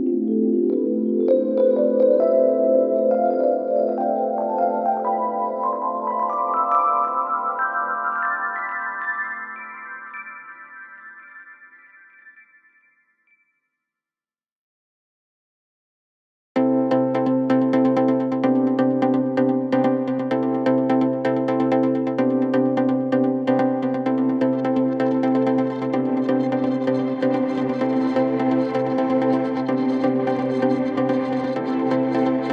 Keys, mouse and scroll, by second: 1.2 v, 2.3 BackSpace, 3.4 click, 4.5 ctrl+t, 5.5-8.4 drag, 9.7 alt+scroll up 1, 10.0 click, 10.8 ctrl+z, 11.6-15.7 drag, 19.4 click, 20.2 ctrl+z, 20.9 click, 22.9-23.4 shift+click, 23.9-24.3 alt+scroll down 2, 24.3 click, 24.7 alt+scroll up 2, 25.4-26.2 shift+drag, 27.1 alt+scroll up 1, 27.4-28.4 click, 28.3 space, 28.5 click, 28.7 space, 29.4 click, 31.7-32.2 alt+scroll down 2.